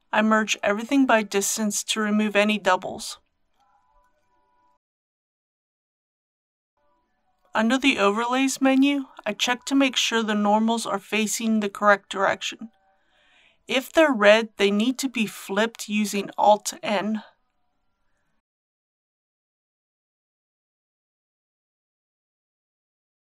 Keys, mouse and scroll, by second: 0.9 m, 3.2 click, 17.0 alt+n, 18.7-19.8 drag, 20.1-21.8 middle drag, 22.8 click.